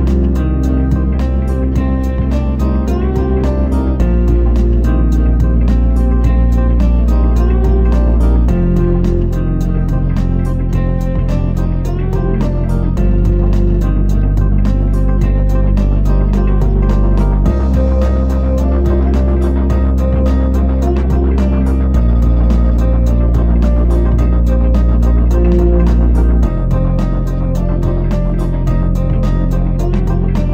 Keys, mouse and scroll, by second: 2.7-5.6 scroll down 15, 5.6 click.